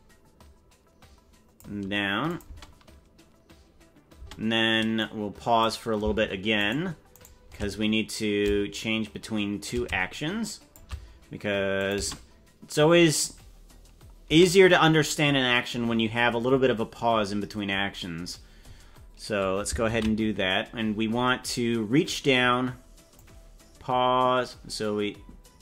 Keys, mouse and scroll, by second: 2.3 click, 2.5 space, 4.2 space, 5.0 click, 6.7 shift+right click, 7.3 shift+right click, 8.4-10.7 shift+drag, 11.7 click, 11.9 space, 14.3 space, 21.4 ctrl+s, 23.1-25.6 drag.